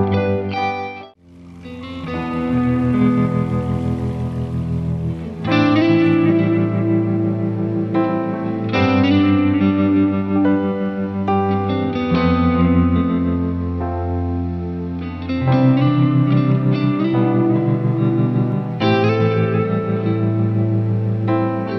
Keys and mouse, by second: 6.4 ctrl+z, 9.8 right click, 12.3 ctrl+z, 12.6 ctrl+z, 16.7 right click, 20.7 ctrl+z.